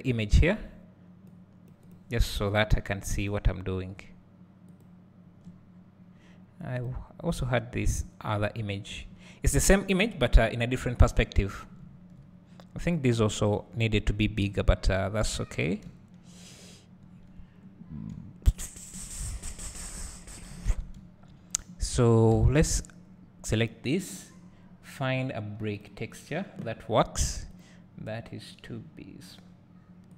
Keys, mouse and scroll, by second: 3.4-7.3 drag, 11.3-12.6 scroll up 1, 12.9 click, 15.8 `, 17.8 scroll up 1, 18.1 `, 19.2 scroll down 1, 21.0 `, 21.9-22.8 scroll up 1, 22.8 click.